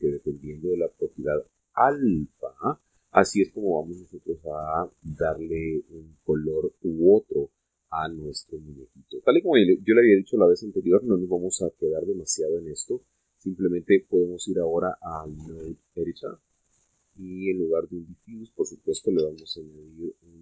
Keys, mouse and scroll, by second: 13.5 click, 16.9 click, 17.2-18.9 middle drag, 18.9 click, 19.8 x, 20.2 shift+a.